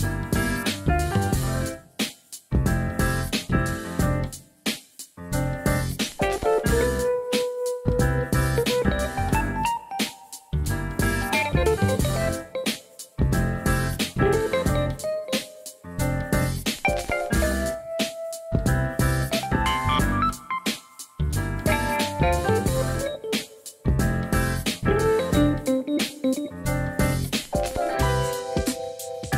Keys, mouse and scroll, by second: 0.1-2.0 drag, 2.0 s, 2.3 y, 4.5 click, 4.9-5.9 drag, 5.9 s, 6.5 y, 8.7 click, 10.1 Tab, 11.1-11.5 middle drag, 11.6 alt+z, 12.1-12.8 middle drag, 13.3 click, 15.1 KP_1, 15.8 Tab, 17.9 s, 18.4 click, 18.4 s, 18.6 ctrl+z, 19.6 s, 20.8 alt+z, 21.3 shift+middle click, 21.6 ctrl+z, 22.0 middle click, 23.8 shift+click, 25.1 s, 25.5 click, 25.9 KP_1, 28.7 shift+middle click.